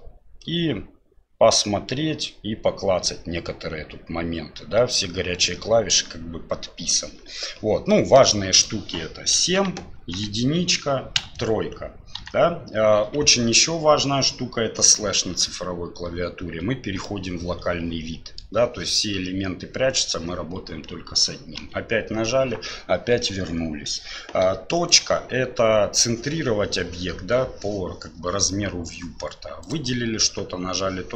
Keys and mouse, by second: 7.9 click, 7.9 right click, 8.5 right click, 9.4 KP_7, 10.0 KP_1, 11.2 KP_3, 12.2 KP_1, 17.0-18.4 drag, 24.9 right click, 25.8 KP_Decimal, 29.6 right click.